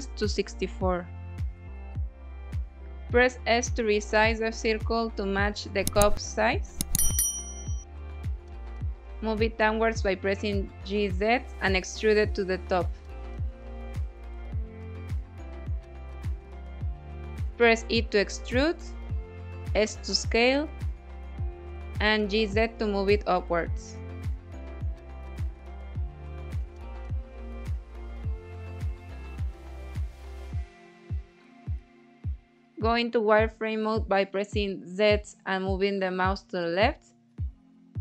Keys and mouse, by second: 2.0 s, 2.9 click, 3.4 Tab, 4.1 1, 4.7-6.0 drag, 6.2 Tab, 7.2 KP_1, 8.2 g, 8.6 z, 10.2 click, 10.8 s, 11.1 shift+z, 13.0-14.1 typing, 13.5 click, 15.6 click, 16.1 Tab, 17.3 e, 18.3 z, 18.8 click, 19.3 s, 20.1 click, 20.5 g, 20.9 z, 22.4 click, 22.7 s, 26.2 click, 27.3-29.1 middle drag, 29.4 shift+middle click, 30.7 KP_1, 31.4 z, 32.4 2, 33.8-35.2 drag, 35.8 middle click, 37.3 z.